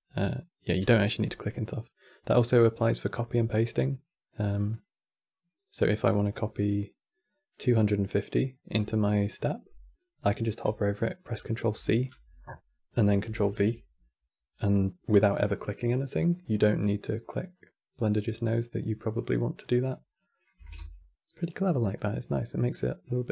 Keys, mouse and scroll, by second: 4.4 click, 11.4 ctrl+c, 12.9 ctrl+v, 19.5-21.6 drag, 21.6-22.7 middle drag, 22.7 click.